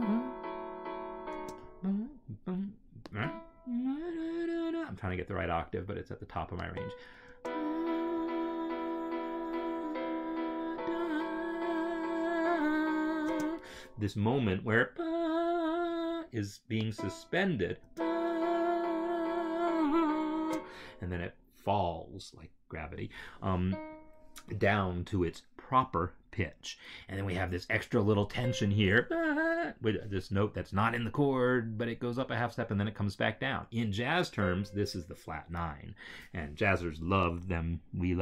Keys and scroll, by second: 1.2 space, 7.2 space, 13.9 space, 18.2 space, 20.3 space, 23.5 space.